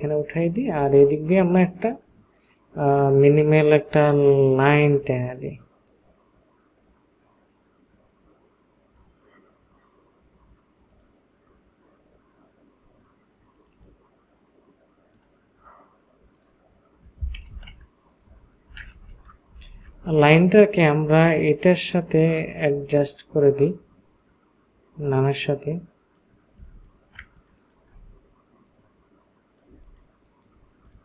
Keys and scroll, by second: 17.5 ctrl+a, 18.7 ctrl+d, 19.6 ctrl+space, 26.7 ctrl+space, 29.7 space.